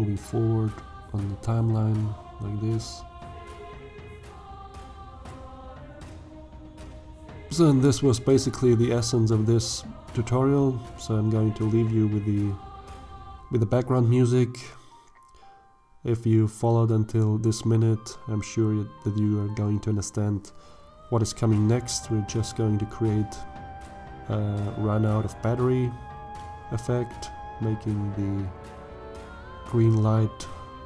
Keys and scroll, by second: 0.2 ctrl+v, 17.4 /, 22.7 g, 23.5 x.